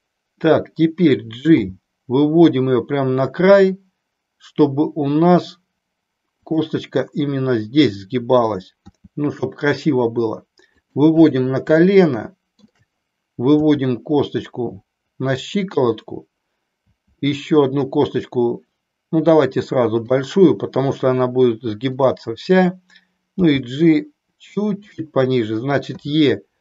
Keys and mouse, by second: 1.6 g, 6.5 click, 10.9 click, 11.9-12.9 shift+middle drag, 20.1 click, 23.4 g, 24.9 click, 25.9 e.